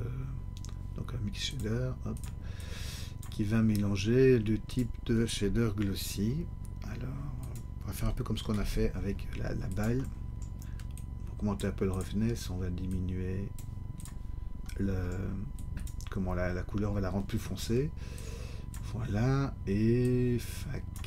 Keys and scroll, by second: 8.6 shift+d.